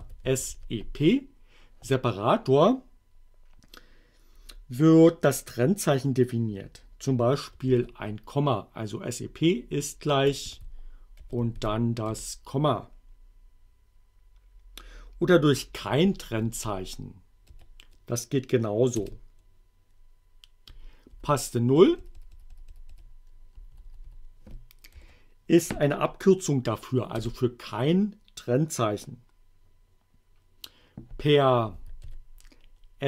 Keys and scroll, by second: 0.0-1.0 typing, 7.7 shift+0, 10.5 shift+2, 11.2 ,, 11.6 shift+2, 12.1 shift+Return, 16.1 Up, 16.5 Left, 17.5 BackSpace, 19.0 Return, 20.7 Up, 21.1 Left, 21.8 BackSpace, 25.0 0, 27.2 Return, 31.5-32.5 typing.